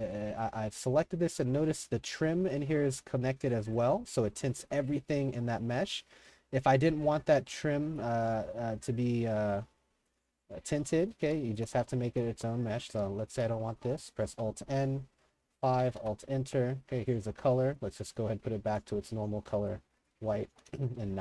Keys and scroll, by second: 0.0-2.4 typing, 3.2 Escape, 4.1 Escape, 5.3 Escape, 6.2 Escape, 6.8 d, 7.9 w, 8.3 d, 8.9 3, 11.0-13.7 typing, 14.2 alt+n, 15.3 5, 15.8 alt+KP_Enter, 20.2-21.2 typing.